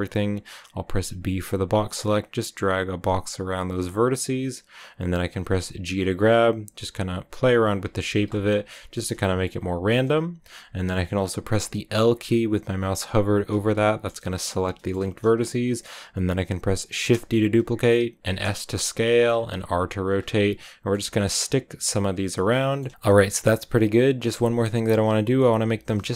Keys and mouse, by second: 0.8 b, 5.7 g, 7.4 click, 7.7 a, 8.0 b, 8.8 g, 9.3 click, 9.5 a, 13.5 l, 14.8 shift+click, 17.0 shift+d, 18.1 click, 18.2 t, 18.2 s, 19.2 click, 19.5 r, 20.1 click, 20.3 middle click, 20.4 click, 20.9 g, 21.2 click, 21.3 z, 22.2 click, 23.2 shift+click, 24.5 shift+click.